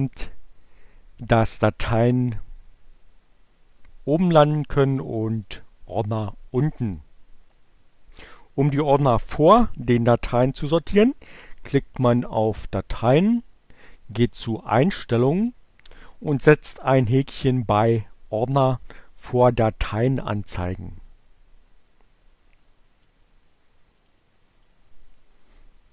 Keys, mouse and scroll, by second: 5.3 click, 12.4 click, 13.5 click, 15.8 click, 21.8-23.3 drag, 24.0 click, 24.6 click.